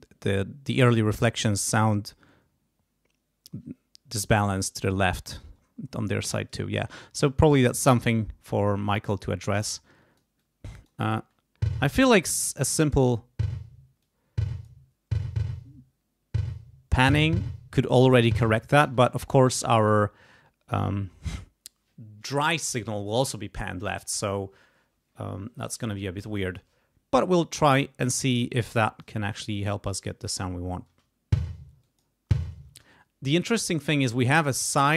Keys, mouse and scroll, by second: 9.6 click, 11.1 space, 12.1 space, 12.2 click, 12.9 space, 14.0 click, 16.4 click, 18.8 space, 19.0 click, 19.8 right click, 20.7 click, 28.6 click, 29.8 click, 30.9 space, 31.8 click, 32.7 space, 34.6 click.